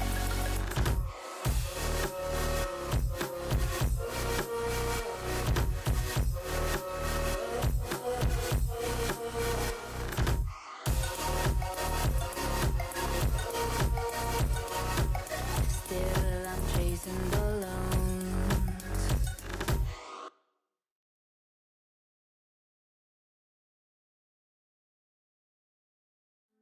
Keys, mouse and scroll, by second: 0.0 KP_3, 0.4 click, 0.9 alt+z, 1.4 alt+z, 1.6 x, 2.1 middle click, 2.6 alt+z, 2.9-3.7 scroll down 1, 3.7 click, 4.1-4.7 scroll down 4, 4.7 Tab, 4.8 click, 5.0 Tab, 7.4-7.8 drag, 7.8 Tab, 8.4-9.0 drag, 9.0 Tab, 9.5 alt+z, 9.7 click, 10.3 ctrl+l, 10.8 x, 11.7 KP_3, 12.2 alt+z, 12.7 Tab, 13.0 shift+click, 13.5 ctrl+j, 14.0 Tab, 14.4 alt+z, 14.5 click, 14.9 shift+middle click, 15.1-15.9 scroll up 6, 15.9 g, 19.2 shift+middle click, 19.4 scroll up 1, 20.1 g, 22.2 scroll down 4, 22.5-23.0 middle drag, 23.0-23.5 scroll down 3, 23.5 a, 24.5 m, 25.6 shift+middle click, 26.0 click, 26.2-26.6 scroll up 3.